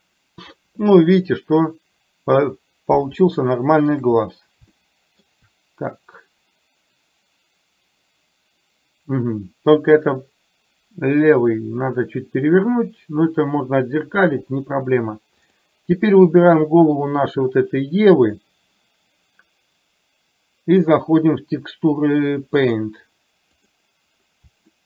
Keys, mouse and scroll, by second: 3.2 shift+middle click, 4.9 shift+middle click, 22.6-23.9 drag.